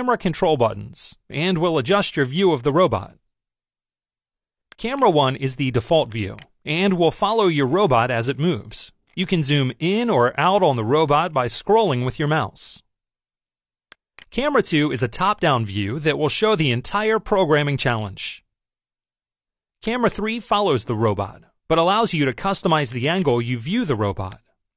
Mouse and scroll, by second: 4.8 click, 6.2 click, 7.1-13.9 middle drag, 14.0 click, 15.0 click, 19.8 click, 23.0 click, 24.3-24.7 drag.